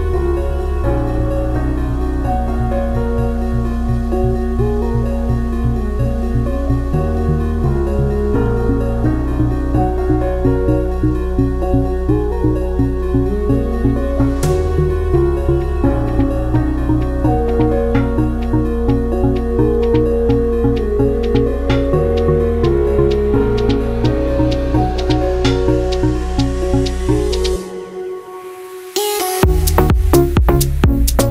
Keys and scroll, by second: 22.9 ctrl+z, 26.3 ctrl+z.